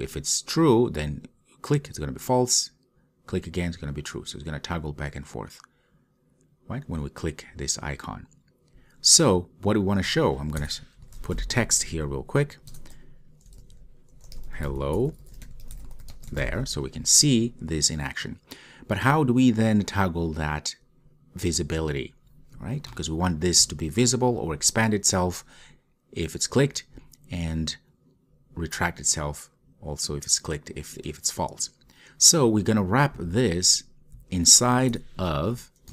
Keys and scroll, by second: 13.0 Return.